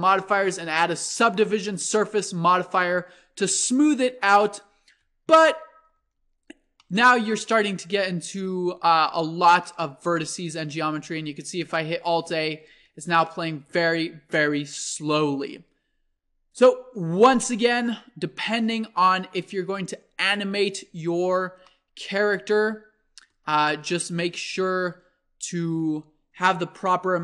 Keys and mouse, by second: 3.7 click, 5.4 z, 6.0 z, 10.7 alt+a, 22.8-27.2 drag.